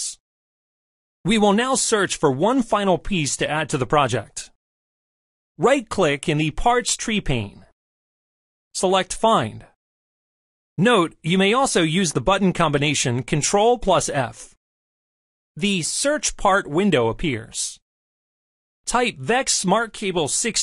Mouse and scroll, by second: 6.4 right click, 9.7 click.